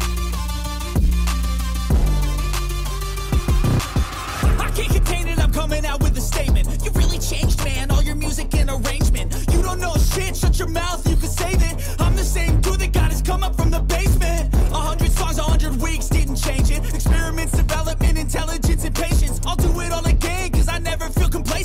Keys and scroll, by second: 4.1 ctrl+-, 6.7 ], 8.3 ], 9.1 ctrl+-, 11.7 ctrl+z, 14.1 ctrl+z, 17.5 space, 19.8 ctrl+-, 20.1 space.